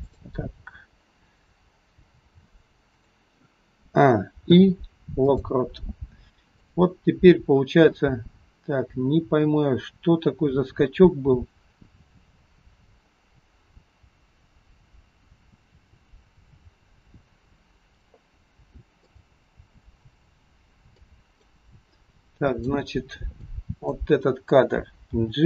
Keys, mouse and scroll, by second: 0.1 click, 1.5 click, 2.0 g, 3.9 a, 4.6 i, 6.6 click, 10.0 click, 19.1 click, 19.9 click, 21.0 click, 22.2 click, 23.5 click, 25.1 g.